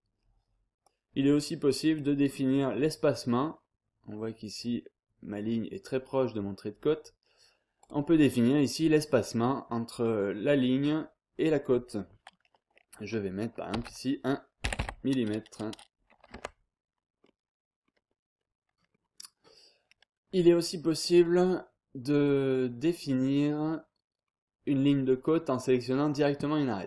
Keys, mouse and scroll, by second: 0.8-2.5 drag, 3.5-4.1 scroll up 2, 4.1 scroll down 2, 4.4-5.1 scroll up 2, 5.8-6.4 scroll down 2, 6.4-6.9 scroll up 2, 7.8 click, 8.5 click, 13.7 1, 14.6 m, 14.8 m, 16.3 Tab, 17.2-17.7 scroll up 2, 17.7-18.4 scroll down 2, 18.4-18.9 scroll up 2, 18.9-19.2 scroll down 2, 19.2-20.0 scroll up 2, 20.2 scroll down 2, 20.5-21.2 scroll up 2, 23.6-23.9 scroll down 2, 23.9-24.5 scroll up 2, 24.7-25.0 scroll down 2, 25.0-25.5 scroll up 2.